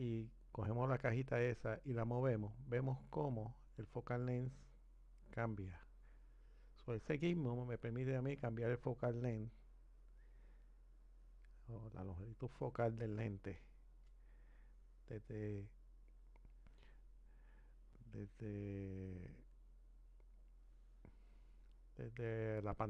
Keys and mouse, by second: 1.4 click, 19.5 click.